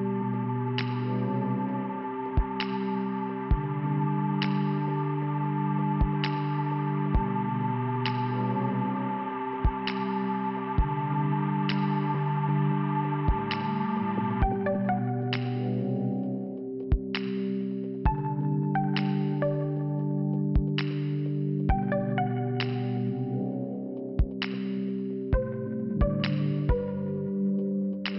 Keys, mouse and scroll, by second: 1.3 click, 2.7 middle click, 3.8 middle click, 5.1 click, 7.3 b, 8.2 scroll up 2, 10.4 click, 19.7 click, 22.8-23.3 scroll up 2, 23.3 scroll down 2, 24.7 click.